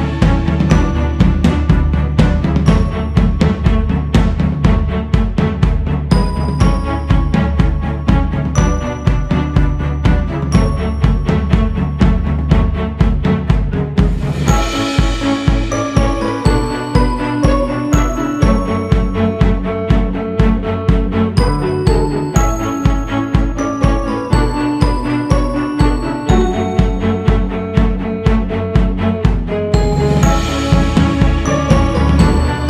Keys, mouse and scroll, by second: 3.1 q, 4.6 f, 8.7-10.1 drag, 10.1 ctrl+z, 11.0-16.4 drag, 16.4-17.2 scroll down 2, 17.2 click, 18.0 click, 19.5-20.9 drag, 20.9 ctrl+z, 21.8-24.9 drag, 25.4 click, 26.1-27.2 scroll up 1, 27.2-29.8 drag, 29.8 shift+s, 30.1 f, 31.0-32.6 drag.